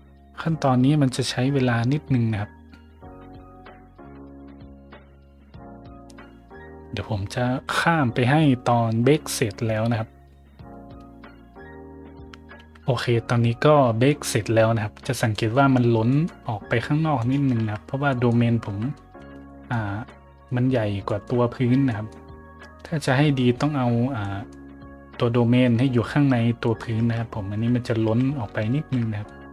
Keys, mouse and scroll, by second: 12.1 click, 15.3 middle drag, 16.1 middle drag, 16.5 scroll down 1, 17.2 right click, 17.6 Tab, 18.1 middle drag, 18.7 z, 18.9 middle drag, 19.5 middle click, 20.0 middle click, 21.1 middle click, 21.9 middle click, 22.4 middle click, 22.8 middle click, 24.2 middle click, 26.6 middle click, 27.0 Tab, 27.7 middle click, 28.0 z, 28.8 shift+z, 29.3 middle drag.